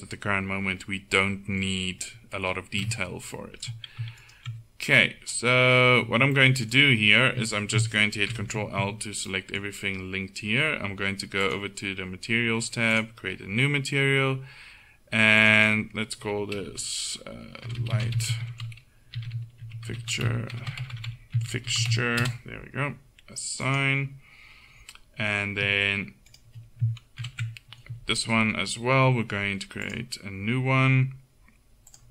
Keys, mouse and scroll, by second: 2.0 middle click, 3.5 middle click, 4.3 right click, 5.2 click, 5.5 middle click, 8.4 ctrl+l, 11.5-20.8 drag, 20.8 BackSpace, 20.9 BackSpace, 21.2 BackSpace, 23.7-24.9 drag, 26.4 right click, 27.3 ctrl+l.